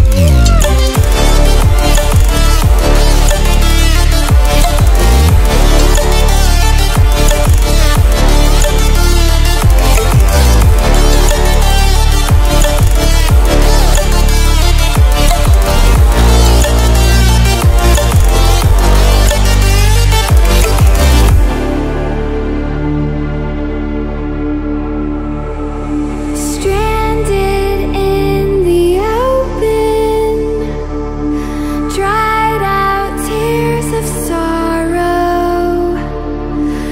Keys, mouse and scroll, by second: 9.3 ctrl+w, 11.1-12.9 drag, 14.2 ctrl+alt+scroll down 1, 14.9-16.5 drag, 17.0 ctrl+alt+scroll up 1, 18.3 ctrl+alt+scroll up 1, 19.1-20.4 drag, 20.8 ctrl+alt+scroll down 1, 21.8 ctrl+click, 22.2 ctrl+alt+scroll down 1, 22.9 ctrl+alt+scroll up 1, 23.4 click, 25.3 ctrl+alt+scroll down 1, 25.8 scroll up 1, 26.6 ctrl+alt+scroll up 1, 27.4-27.8 scroll down 1, 28.6-32.5 drag.